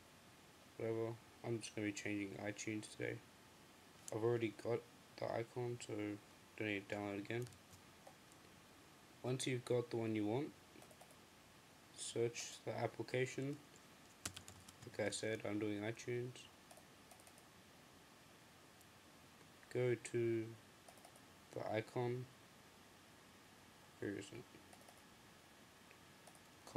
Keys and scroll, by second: 7.5 m, 13.9-15.4 typing.